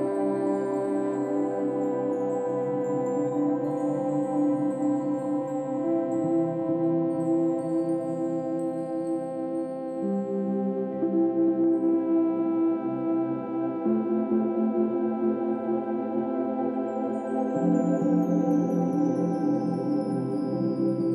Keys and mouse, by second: 1.3-2.9 drag, 2.5 typing, 3.5 click, 3.7 click, 4.4 click, 4.5 click, 7.3 click, 7.5 click, 8.0-9.3 drag, 9.8-10.7 typing, 11.9-12.6 typing, 14.1-17.3 drag, 18.1 typing, 18.9-20.2 ctrl+alt+drag, 20.7 ctrl+alt+click.